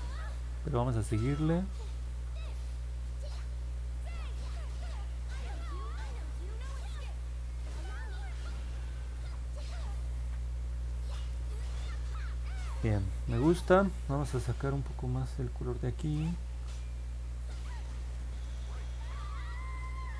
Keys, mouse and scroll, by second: 3.4 click, 4.7-5.8 drag, 6.4 click, 7.5 click, 10.8 middle click, 11.0 scroll down 1, 11.3-12.1 scroll up 3, 12.3 scroll down 1, 16.4 click, 16.9 click, 17.7 click, 18.0 click, 19.0 click.